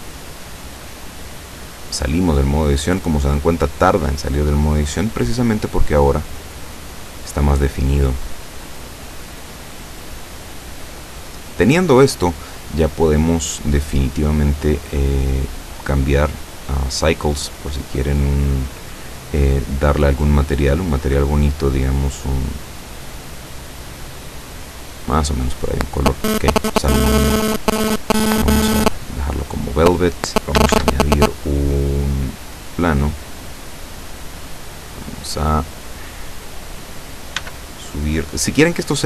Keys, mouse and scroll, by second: 4.8-5.2 scroll up 2, 5.7-12.0 middle drag, 15.9 click, 17.4 click, 19.1 click, 19.8 click, 21.0 click, 22.3 click, 26.1 click, 28.0 click, 28.9 scroll down 1, 30.7 shift+a, 32.6 click, 33.5-34.5 middle drag, 34.8-36.8 drag, 37.4 s, 38.2 click.